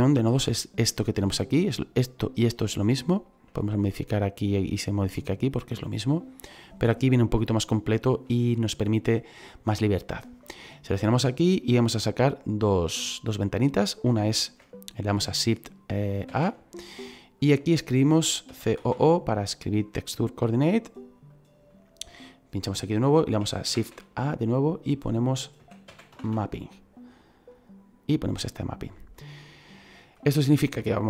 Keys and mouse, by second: 2.8 middle click, 6.5 shift+middle click, 7.4 shift+middle click, 11.0 click, 16.2 shift+a, 17.3 click, 18.4 c, 18.7 o, 20.5 click, 24.6 click, 25.5 m, 25.8 a, 26.1 p, 27.4 click, 28.5 click, 29.8 click.